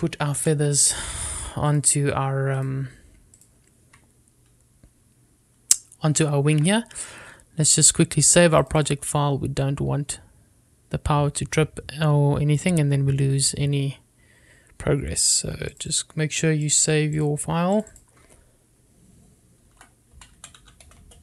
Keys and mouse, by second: 0.4 click, 1.6 g, 2.0 click, 2.8 click, 3.8 click, 4.6 click, 7.7 ctrl+s.